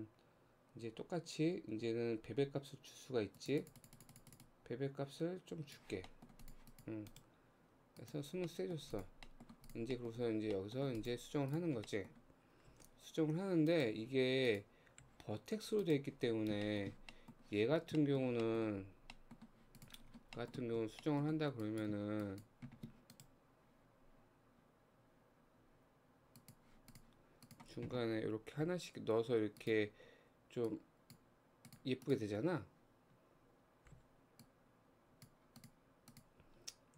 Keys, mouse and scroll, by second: 0.4-1.6 scroll up 1, 1.7-3.0 scroll down 4, 3.4-6.1 drag, 6.1 middle click, 6.4 click, 6.7 click, 7.1-8.5 right drag, 8.5 middle click, 9.0 click, 9.3 middle click, 9.7 click, 10.0 middle click, 10.2 Tab, 10.6 middle click, 11.0 click, 11.5 click, 11.9 middle click, 12.7 g, 14.5 click, 15.0 g, 16.2-16.7 scroll down 3, 16.7 shift+middle click, 17.1 scroll up 1, 17.1 middle click, 17.6 Tab, 17.8 scroll up 2, 18.0 shift+middle click, 18.9-19.2 scroll up 2, 19.2 middle click, 19.8 click, 20.1 scroll down 3, 20.4 shift+middle click, 20.8 Tab, 21.0 middle click, 21.6 click, 22.2 shift+click, 23.2-26.2 right drag, 26.9 click, 27.5 click, 28.6 g, 30.7 click, 31.7 click, 32.0 click, 34.0 g, 35.6 click, 36.1 click.